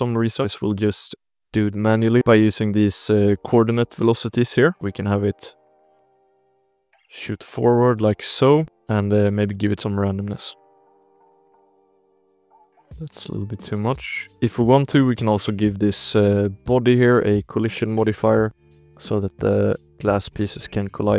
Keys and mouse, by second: 0.7 drag, 1.3 space, 1.9 space, 3.3-4.6 drag, 4.9 space, 5.4 shift+drag, 6.2 space, 6.3 drag, 6.6 space, 6.8 space, 7.1-7.9 drag, 9.2 click, 10.2 ctrl+s, 10.8 click, 11.0 space, 12.8 space, 12.9 click, 13.6 ctrl+s, 14.0 click, 15.0 click, 15.5 shift+click, 16.3-16.6 drag, 16.7 shift+drag, 17.5 click, 18.3 click, 18.4 space.